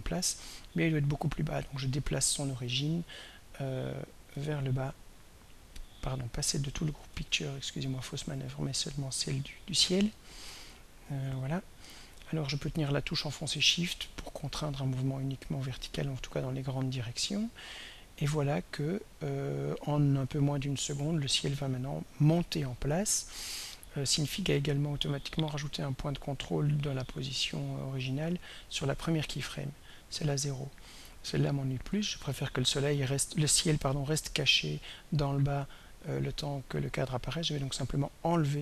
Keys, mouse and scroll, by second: 0.9-4.6 drag, 7.0 ctrl+y, 8.8 click, 10.7-16.7 drag, 19.9-37.3 drag, 38.5 right click.